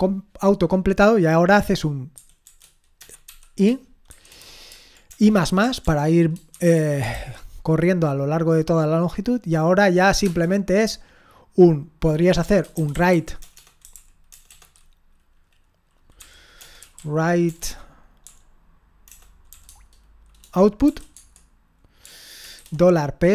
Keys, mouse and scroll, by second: 2.4-4.1 typing, 5.1-7.1 typing, 10.2 Return, 12.5-14.5 typing, 16.2-19.5 typing, 19.6 Tab, 20.9 0, 21.2 Tab, 22.0-23.3 typing.